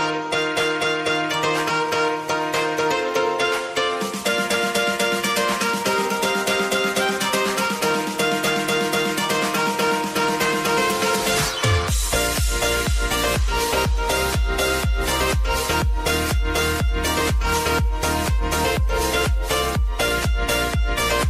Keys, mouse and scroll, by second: 0.6 j, 1.9 click, 2.6 Return, 4.0 click, 5.0 F9, 5.8 click, 6.4-6.7 typing, 7.3-10.1 drag, 10.1 space, 12.0 click, 14.9 space, 15.8-19.5 drag, 19.5 click, 20.8 space.